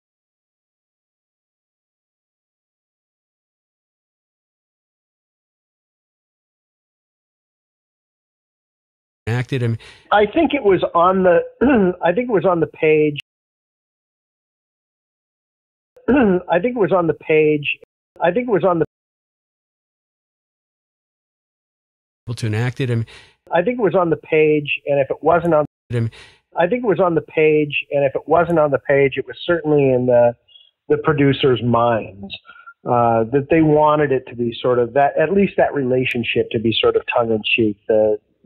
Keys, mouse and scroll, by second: 1.5-3.1 drag, 3.1 Delete, 3.4 click, 4.3-5.7 drag, 6.3 click, 6.8 click, 7.8 click, 8.3 click, 9.1 click, 9.2 space, 10.9 click, 11.4 click, 12.2 click, 13.1 space, 13.6 click, 14.3-15.5 drag, 15.7 click, 15.7 space, 16.5-17.7 drag, 17.7 space, 17.9 click, 17.9 space, 18.8 space, 19.0 click, 20.1-21.8 drag, 22.1 click, 22.2 space, 24.2 click, 24.7 click, 25.5 space, 25.7 click, 25.8 space, 27.2 click, 27.7 click, 29.2 ctrl+s, 30.6-32.1 drag, 32.6 click, 33.2 click, 34.3 click, 35.1 click, 36.3 click, 36.7-38.3 drag.